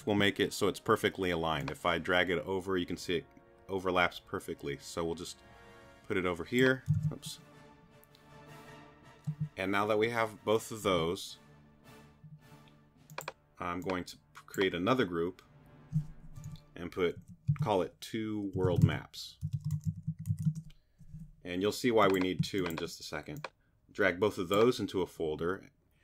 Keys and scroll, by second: 6.9 shift+super+z, 7.7 super+z, 17.2-20.8 typing.